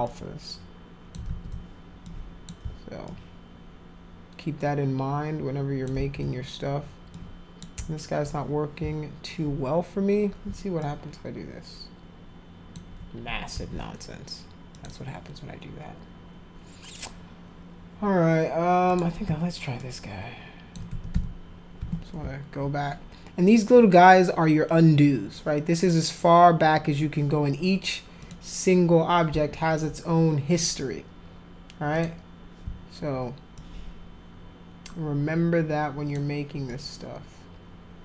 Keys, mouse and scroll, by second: 0.1-1.2 alt+drag, 1.3 ctrl+z, 2.1 alt+click, 3.1-5.9 alt+drag, 6.0 ctrl+z, 7.1 alt+click, 10.8-12.7 alt+drag, 13.5 ctrl+z, 14.8 click, 18.9 click, 19.8 alt+click, 20.9 ctrl+z, 21.1 ctrl+z, 21.8 ctrl+z, 28.2 click, 30.6 click, 32.0 click, 33.6-36.1 alt+drag, 36.7-38.0 alt+drag.